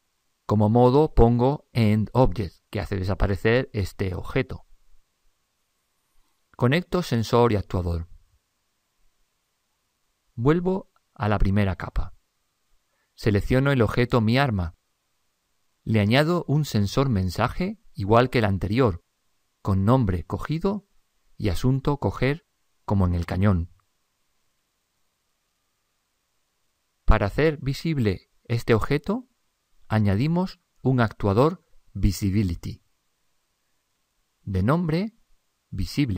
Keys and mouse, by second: 2.3 click, 12.0 click, 13.7 typing, 15.1-15.8 typing, 15.3-16.8 right drag, 17.3 typing, 18.1 click, 18.8 click, 22.2 click, 30.3 click, 33.1 click.